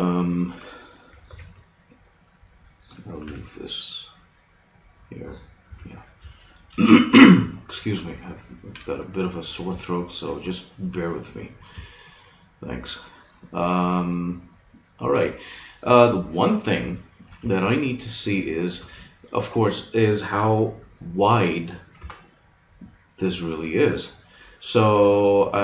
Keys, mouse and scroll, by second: 1.2 b, 1.4 click, 3.2 g, 5.4 click, 5.6 a, 7.8 middle click, 8.5 middle click, 12.8 middle click, 16.6-20.6 middle drag, 22.0 KP_1.